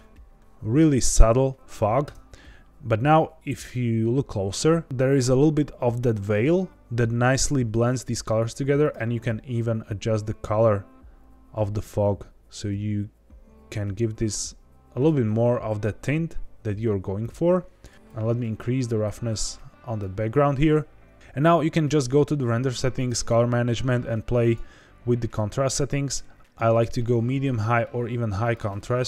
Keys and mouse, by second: 2.0 KP_0, 17.2 click, 17.9 click, 18.5-19.9 drag, 24.3-28.7 drag.